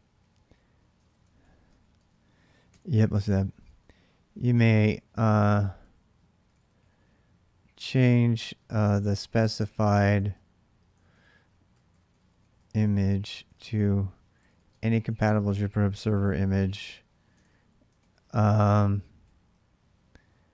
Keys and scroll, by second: 0.7 ctrl+[, 1.0 k, 1.5 ctrl+a, 2.4-7.1 typing, 3.1 ctrl+[, 3.1 ctrl+j, 8.2-17.8 typing, 18.8-19.3 typing.